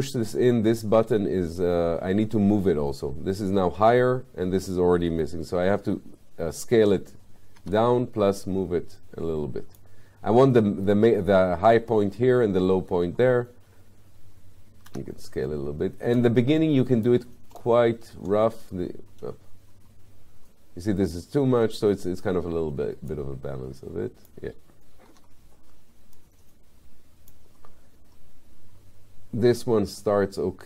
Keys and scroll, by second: 7.7 w, 14.9 r, 25.1 w.